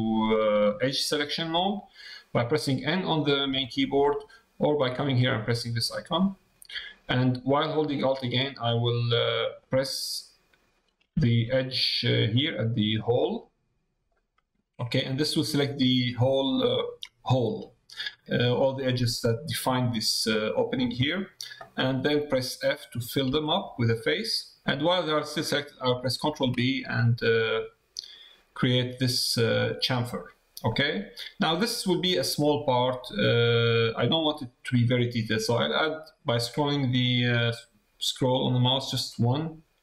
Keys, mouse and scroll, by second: 13.2 middle click, 15.0 middle click, 24.0 middle click, 24.9 middle click.